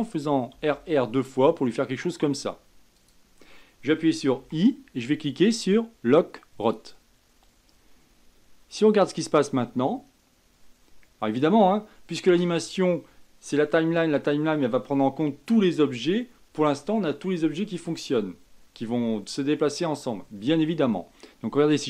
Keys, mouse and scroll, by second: 0.8 r, 4.7 i, 6.9 i, 9.0-12.0 drag.